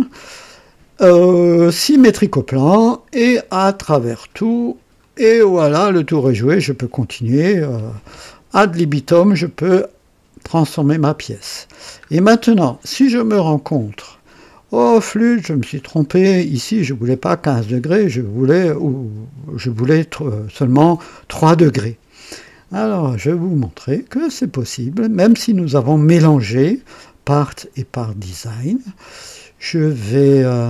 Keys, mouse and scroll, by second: 1.7 click, 3.4 click, 4.1 click, 5.0 click, 5.7 click, 8.2-10.6 drag, 11.0 scroll up 2, 11.7 scroll down 2, 12.3 click, 15.8 click, 28.3 click.